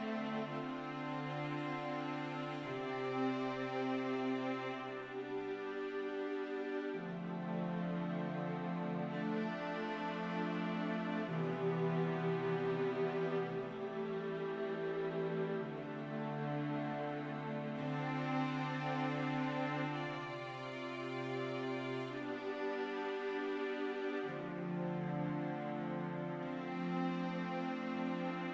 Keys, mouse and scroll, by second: 5.4 click, 6.6 1, 10.7 2, 12.0 3, 22.2 click, 24.8 click.